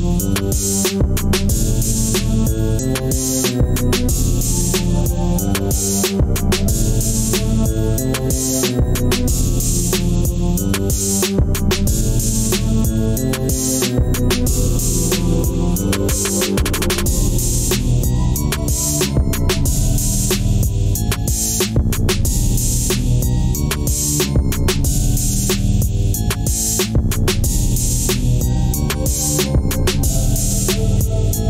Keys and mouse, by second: 2.8 click, 6.1 g, 8.4 drag, 9.1 g, 18.2 click, 25.1 drag.